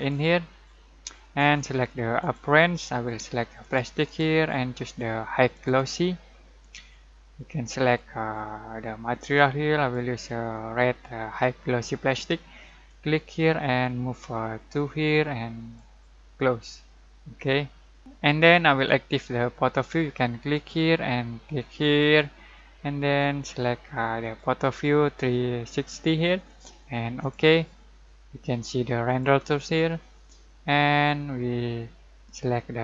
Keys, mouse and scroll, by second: 12.8-18.0 drag, 20.5 click, 27.2 click.